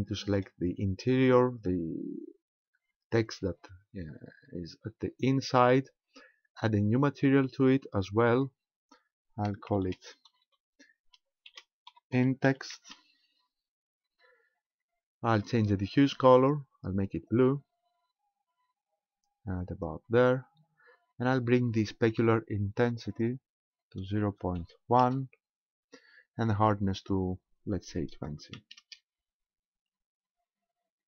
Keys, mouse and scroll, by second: 0.3 right click, 7.2 click, 8.4 click, 16.4 click, 23.1 click, 27.0 click.